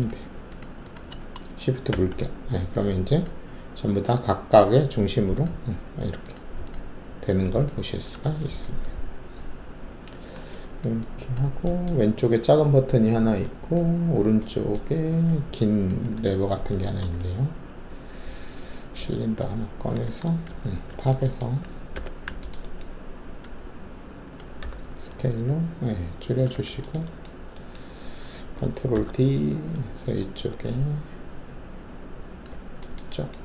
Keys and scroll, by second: 1.9 shift+`, 19.6 alt+shift+w, 20.4 shift+2, 21.9 alt+4, 24.6 r, 26.5 w, 28.9 ctrl+alt+d.